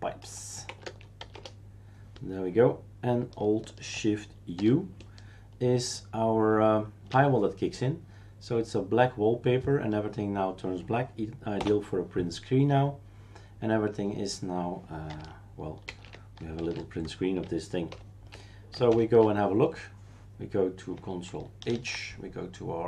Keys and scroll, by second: 0.0-1.7 typing, 4.6 alt+shift+u, 11.6 Print, 16.1 shift+super+q, 16.6 shift+super+q, 17.9 super+Return, 19.1 shift+super+q, 21.7 ctrl+h.